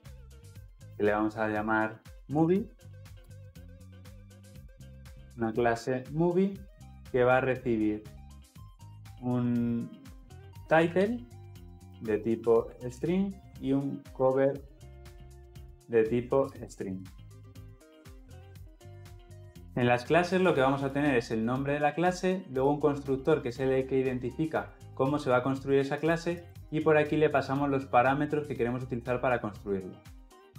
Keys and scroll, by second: 1.4 alt+Insert, 18.8 Escape.